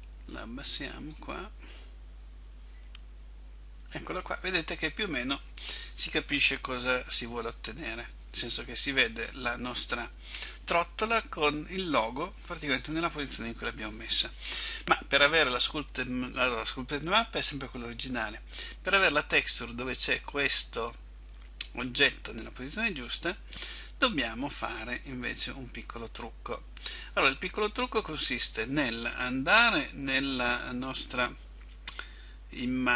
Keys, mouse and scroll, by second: 25.4 Tab, 25.4 Escape.